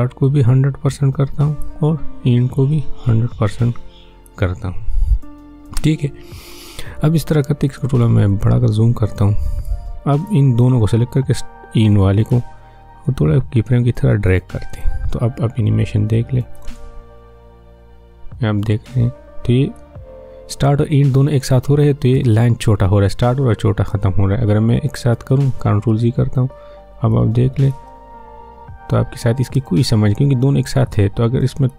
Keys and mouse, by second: 0.2-8.3 drag, 8.3-16.6 drag, 16.6 space, 19.7-22.1 drag, 22.1 space, 26.5 ctrl+z, 27.1 click, 27.7 space, 30.9-31.7 drag.